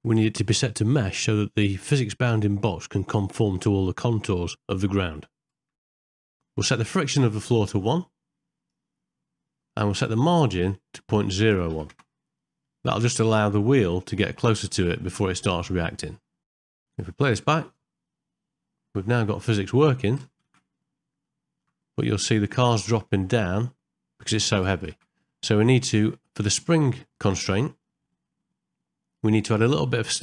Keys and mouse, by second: 4.8 shift+middle click, 5.5 ctrl+middle click, 6.1 middle click, 7.9 click, 10.5-12.0 drag, 13.2 ctrl+middle click, 13.7 middle click, 16.5 shift+middle click, 16.7 middle click, 17.6 space, 19.2 shift+Left, 20.2 space, 20.5 shift+Left, 21.3 ctrl+middle click, 22.0 middle click, 23.0 space, 25.0 shift+Left, 26.9 click, 28.3-29.9 middle drag.